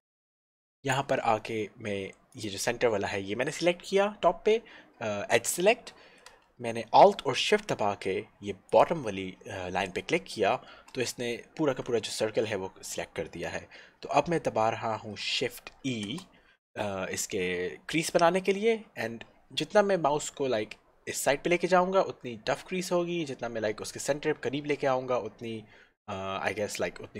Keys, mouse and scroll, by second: 2.4 click, 8.8 alt+shift+l, 16.0 shift+e.